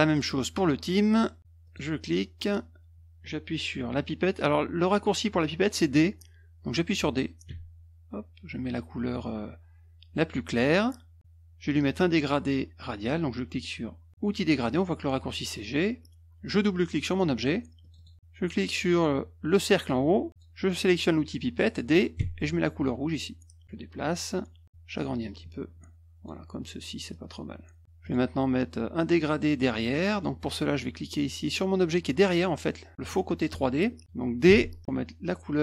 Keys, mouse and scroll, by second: 0.0 click, 1.6 click, 7.4 d, 10.5 click, 14.3 click, 17.8 click, 17.9 click, 20.3 click, 22.2 d, 23.0 click, 23.6-24.6 drag, 25.2-26.2 drag, 27.1 click, 28.0 click, 30.1 click, 32.0 click, 34.5 d.